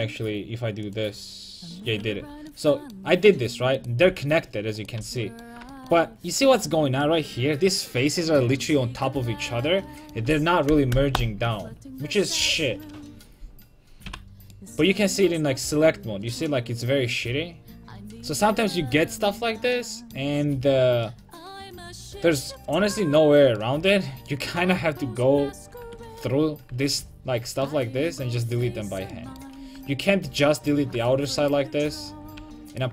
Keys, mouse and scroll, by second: 0.9-2.5 drag, 2.2 a, 3.8-5.2 right drag, 4.1 g, 5.0 a, 5.3 right click, 9.1 middle click, 14.1 a, 14.5 middle click, 21.3-22.8 middle drag, 25.8 Tab, 26.3 Tab, 26.7 Tab, 29.8 Tab, 30.6-32.9 right drag, 32.4 a.